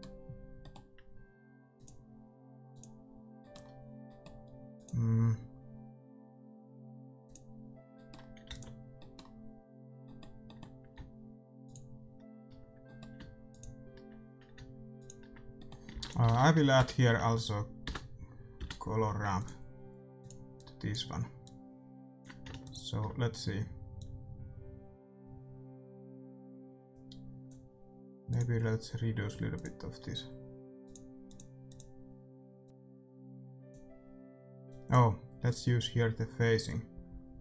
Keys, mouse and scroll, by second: 1.7-6.6 drag, 3.3-5.8 middle drag, 7.9-12.3 middle drag, 8.4 ctrl+s, 11.6-16.9 drag, 12.8-14.6 middle drag, 15.5-19.1 middle drag, 15.9 shift+a, 20.2-25.8 drag, 28.2-32.6 drag, 34.6-37.4 drag.